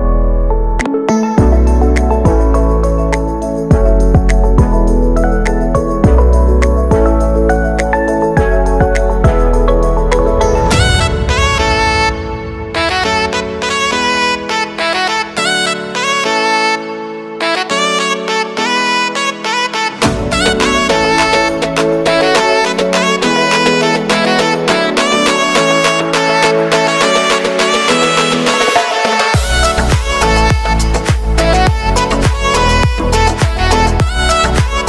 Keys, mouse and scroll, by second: 0.0-0.4 typing, 1.4-3.1 scroll down 1, 3.1-9.3 drag, 10.2 u, 10.6 space, 12.5-15.6 drag, 15.6 j, 16.0 space, 19.1 ctrl+Num_Lock, 19.1 click, 19.3 ctrl+d, 21.0 click, 21.0 click, 21.6 u, 22.3 click, 23.1 space, 25.6 space, 27.7 click, 28.6 ctrl+d, 29.2-34.8 drag.